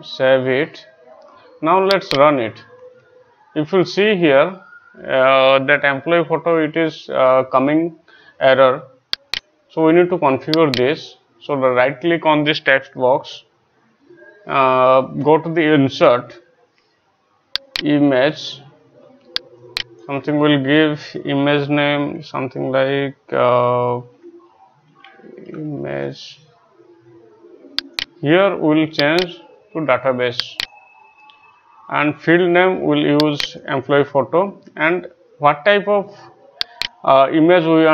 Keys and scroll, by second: 24.1-26.1 typing.